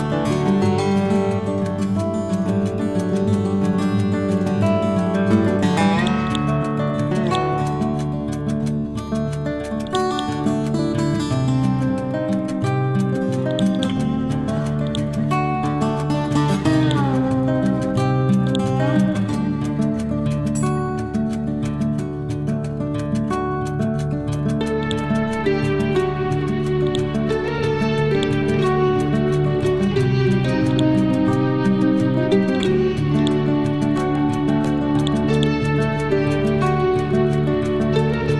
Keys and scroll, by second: 1.0 F12, 1.5 1, 1.7 0, 1.9 Return, 3.0 F12, 4.2 8, 4.5 Return, 11.1 F12, 11.8 5, 12.1 Return, 21.2 Up, 21.9 Down, 22.5 Right, 33.9 ctrl+z, 36.5 ctrl+z.